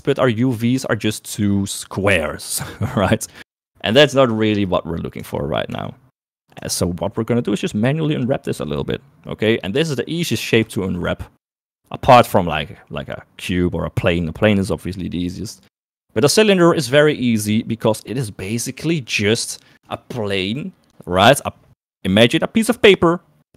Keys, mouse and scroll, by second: 5.2 Tab, 6.0 Tab, 6.7 Tab, 9.9 middle click, 11.0 shift+middle click, 11.5 middle click, 15.6 middle click.